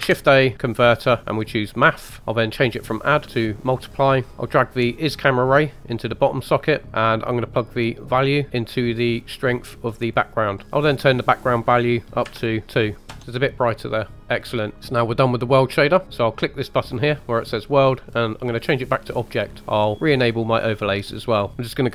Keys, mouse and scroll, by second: 0.0 shift+a, 2.2 click, 2.9-4.3 drag, 5.1 drag, 6.8-7.7 middle drag, 8.1 drag, 11.2-13.2 drag, 13.2 middle click, 13.2 scroll down 2, 16.0 click, 16.9-18.7 drag, 19.6 click, 19.9 click, 20.7 middle click, 21.3 scroll down 1.